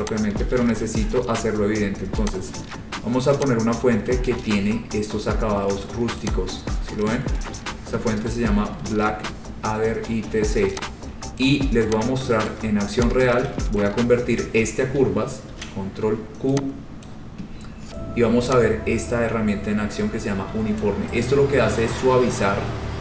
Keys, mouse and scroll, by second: 0.1 click, 0.3 click, 0.5 ctrl+a, 1.2 scroll, 2.4 click, 3.6 click, 4.3-5.4 scroll, 6.5 click, 12.6 shift+click, 12.6 shift+right click, 13.5 shift+right click, 15.7 ctrl+q, 17.2 click, 20.9 click, 22.0-23.0 scroll.